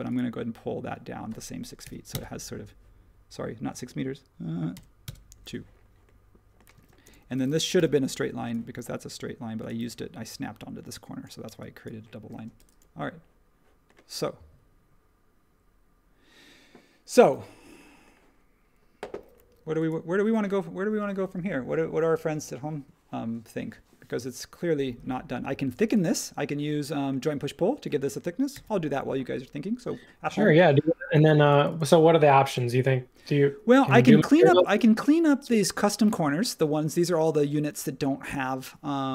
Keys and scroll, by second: 4.1 typing, 6.7 space, 7.7 |, 9.8 e, 12.3 space, 28.5 super+s.